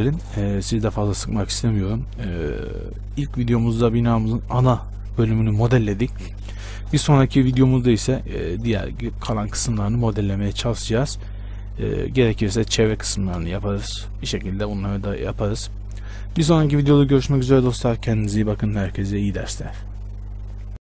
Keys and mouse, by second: 19.1-20.9 drag.